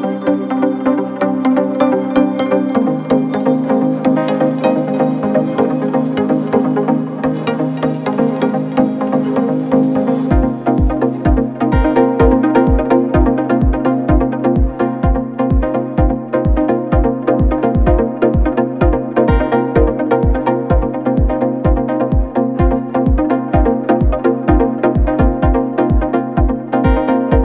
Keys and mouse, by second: 10.2 click, 18.3 click, 19.0-24.9 drag, 25.4 click, 27.2 click.